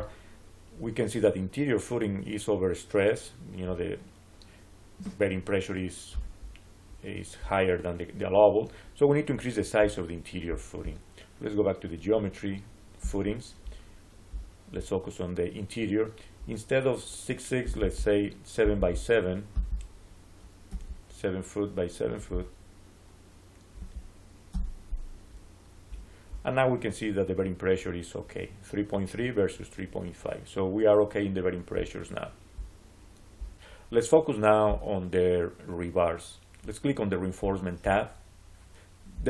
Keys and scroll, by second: 20.6 7, 23.6 7, 24.4 Return.